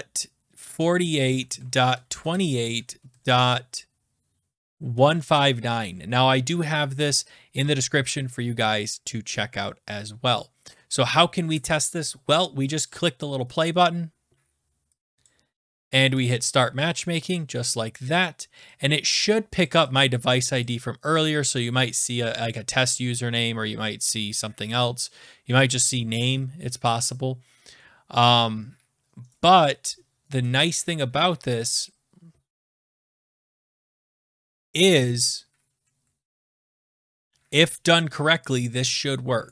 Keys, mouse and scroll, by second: 0.4-2.7 typing, 1.4 Right, 3.0 Right, 4.6-5.8 typing, 6.4 Right, 12.9 click, 15.3 click, 16.2 click, 17.0 click, 18.0 click, 19.6 click, 20.6 click, 22.1 click, 26.6 click.